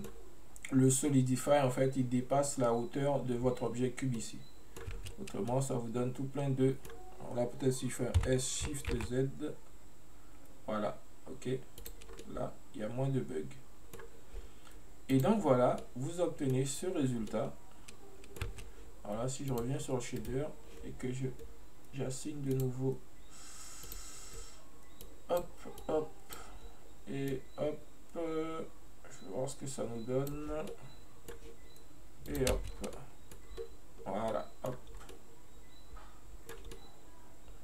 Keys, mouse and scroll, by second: 4.2-5.0 middle drag, 5.0 space, 5.6-8.3 middle drag, 8.3 s, 12.2 scroll down 2, 12.3-15.2 middle drag, 15.2 click, 15.9-17.0 middle drag, 17.0-17.4 scroll up 2, 17.4-18.5 middle drag, 18.5 space, 19.5 click, 20.2 right click, 22.6 click, 23.9-30.4 drag, 30.7 scroll down 1, 30.7-32.3 middle drag, 32.3 click, 32.8 scroll down 1, 33.0-33.7 middle drag, 33.7-34.2 scroll up 2, 34.4-35.0 middle drag, 35.0 scroll down 1, 35.2-37.6 middle drag.